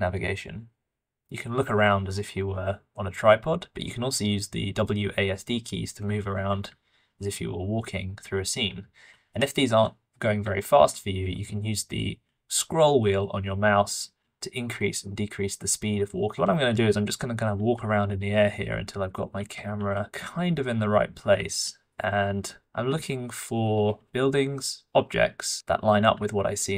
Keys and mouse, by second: 12.7-22.0 middle drag.